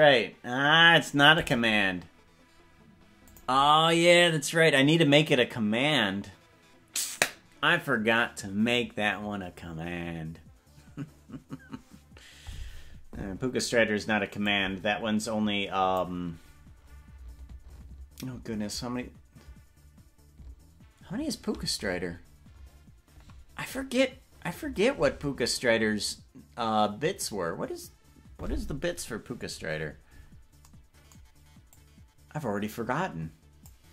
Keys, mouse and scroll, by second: 14.7-16.2 drag, 31.9-33.9 drag.